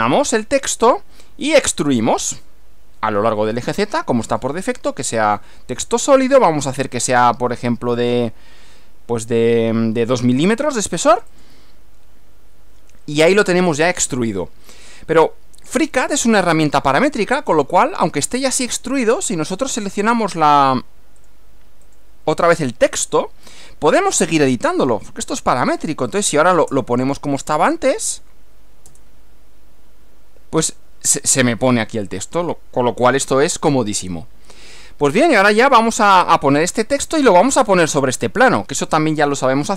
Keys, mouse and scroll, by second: 1.7 click, 4.4 click, 6.9 click, 7.1-8.1 middle drag, 8.1 scroll up 2, 8.3-11.4 middle drag, 11.4 click, 19.8 click, 21.3 click, 21.9 click, 24.3 click, 26.3 BackSpace, 28.9 Return, 36.2-37.5 middle drag.